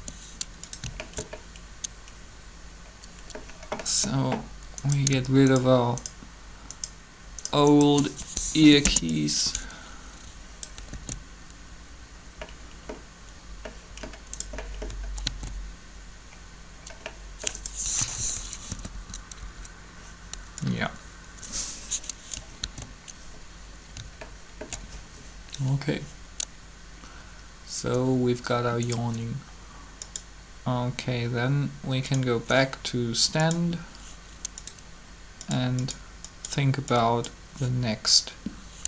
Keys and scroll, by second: 8.3 shift+Delete, 8.6 Return, 10.9 alt+a, 15.2 alt+a, 17.9 3, 18.7 Up, 18.8 Up, 22.6 alt+a.